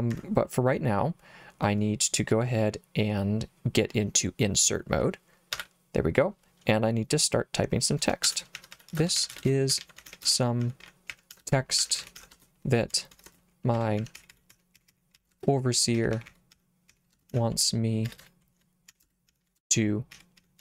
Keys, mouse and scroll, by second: 5.6 i, 8.1-20.6 typing.